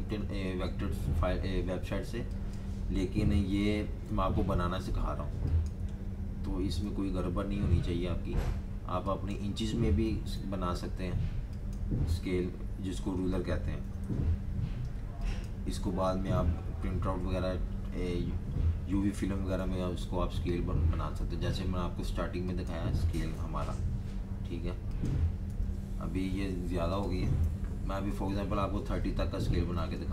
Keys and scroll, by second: 3.7 2, 4.0 4, 6.3-7.3 typing, 9.7-10.7 typing, 13.6-14.5 typing, 19.1-20.0 typing, 22.9-23.8 typing, 25.2-25.9 typing, 27.5 super+-, 27.7 super+-, 27.9 super+-, 28.1 super+-, 29.0 super+-, 29.6 super+-.